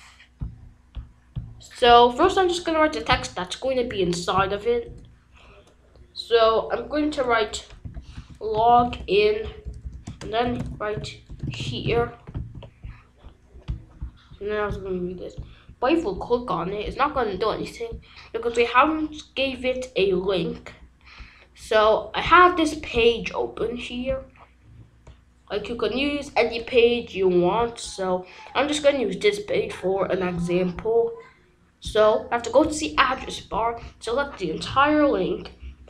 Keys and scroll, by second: 4.3 y, 4.8 BackSpace, 7.8-12.3 typing, 12.4 ctrl+s.